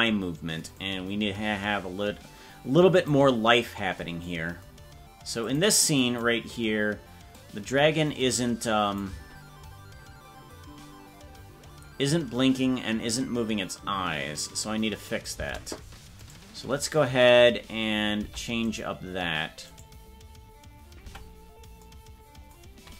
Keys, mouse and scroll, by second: 0.9-3.2 drag, 5.5 drag, 6.1 click, 7.4 click, 9.1 space, 15.5 space, 16.3 right click, 18.3 ctrl+Tab, 18.9-21.1 right drag, 21.1 Tab.